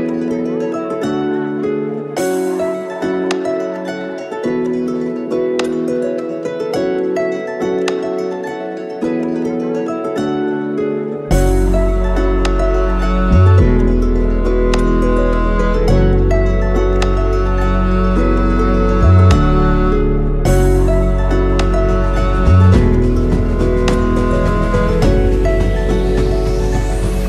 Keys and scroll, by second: 3.0 ctrl+z, 8.3 ctrl+c, 10.5 ctrl+c, 26.3 F2.